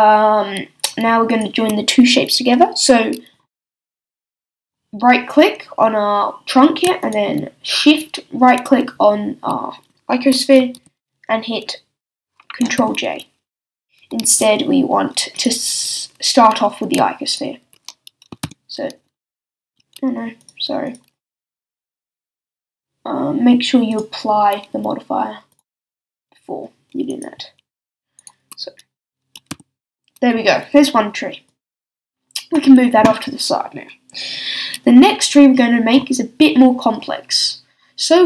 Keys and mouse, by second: 9.9 middle click, 10.7 super+j, 12.8 j, 14.2 z, 18.4 ctrl+j, 19.7 z, 29.5 ctrl+j.